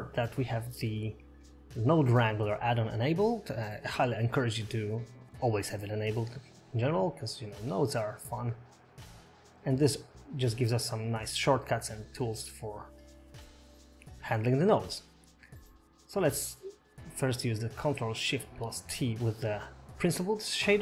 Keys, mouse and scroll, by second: 1.5 click, 13.8 click, 15.0 middle click, 16.6 middle click, 17.3-17.8 scroll down 5, 19.4 click.